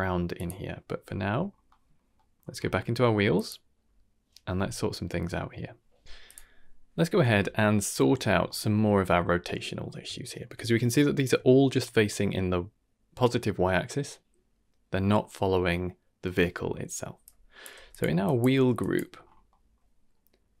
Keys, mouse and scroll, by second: 0.4 click, 1.3-2.0 scroll down 3, 1.6 middle click, 2.1 middle click, 2.4-3.3 scroll up 4, 3.3 click, 6.2 click, 8.0 scroll down 1, 8.4 shift+middle drag, 9.8 scroll up 2, 10.2 shift+middle drag, 10.5-11.0 scroll up 3, 10.9 shift+middle drag, 12.1-16.2 middle drag, 16.7 middle click, 17.2-17.6 drag, 17.7 g, 18.2 drag, 18.5 g, 19.1-19.8 scroll up 3, 19.4 middle click.